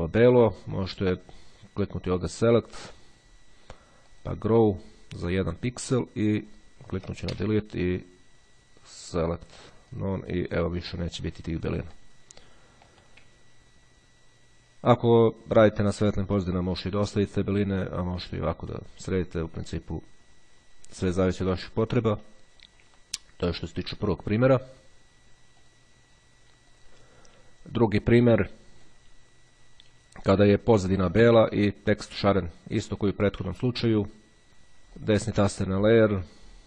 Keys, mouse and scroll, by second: 2.3 click, 4.3 click, 6.0 click, 7.4 Delete, 9.2 click, 10.0 click, 11.1 click, 12.0 middle click, 13.1 middle click, 14.4-15.4 ctrl+scroll down 1, 15.9 middle click, 17.4-18.6 middle drag, 18.8 middle click, 20.0-21.3 ctrl+scroll down 1, 21.3-21.8 ctrl+scroll up 1, 21.8-22.2 ctrl+scroll up 1, 22.2 click, 23.0-24.0 scroll down 1, 24.0-24.6 ctrl+scroll down 1, 24.6-25.0 ctrl+scroll down 1, 25.5 click, 28.6 click, 35.2 right click.